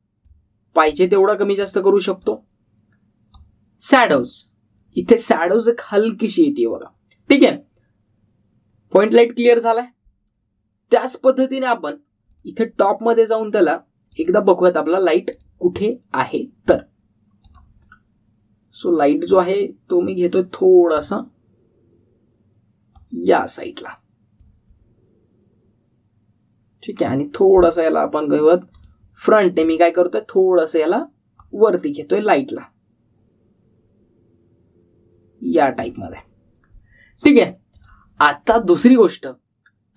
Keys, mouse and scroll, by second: 2.9 drag, 10.3 click, 13.2 click, 19.1-20.2 scroll up 1, 20.2-22.1 click, 29.7 click.